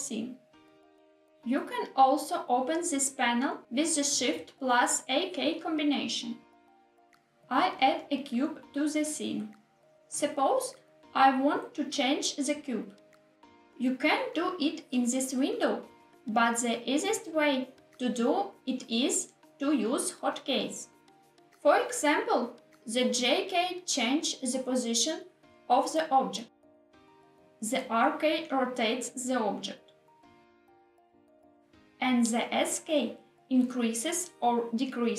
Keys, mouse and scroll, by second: 5.6 shift+a, 15.1 click, 17.7-20.4 drag, 20.7 click, 22.1 g, 24.6 click, 25.5 ctrl+z, 27.6 r, 31.2 click, 31.6 ctrl+z, 31.7 s, 34.9 click.